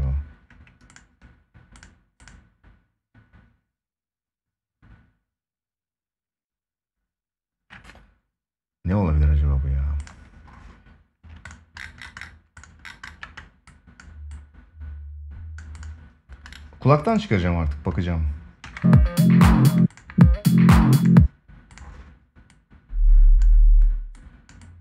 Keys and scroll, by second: 18.3 space.